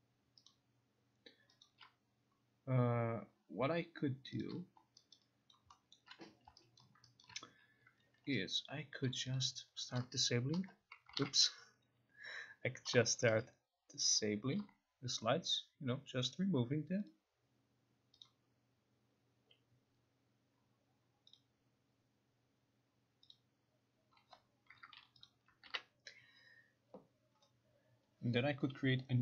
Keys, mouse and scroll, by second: 0.5 click, 1.7 click, 4.5 click, 5.2 alt+right click, 5.6 alt+click, 5.6 alt+right click, 6.0 alt+middle click, 6.0 alt+click, 6.9 alt+right click, 6.9 alt+middle click, 7.3 alt+right click, 9.4 click, 10.1 Delete, 11.3 ctrl+z, 12.5 click, 12.9 Delete, 14.3 click, 14.6 Delete, 15.5-16.0 scroll, 16.4 middle click, 17.1 click, 18.3-19.5 drag, 19.5 Delete, 20.1-21.3 middle drag, 20.1-20.7 scroll, 20.7 scroll up 1, 20.7 scroll, 21.4 click, 23.4 click, 25.3 click, 25.7 ctrl+r.